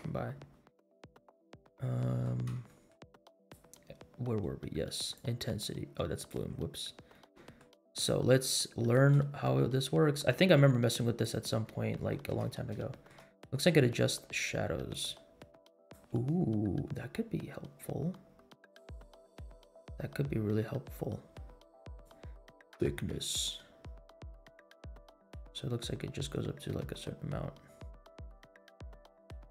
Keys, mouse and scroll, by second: 0.9-2.2 middle drag, 2.6 shift+middle drag, 3.3-3.7 drag, 5.1-6.7 drag, 7.1 middle click, 8.9-11.4 drag, 11.6 scroll up 2, 11.9-12.3 shift+middle drag, 12.6 scroll up 1, 12.9 shift+middle drag, 13.3 scroll down 1, 14.9-16.2 drag, 16.5 scroll down 2, 17.1 scroll up 2, 22.0-29.5 drag.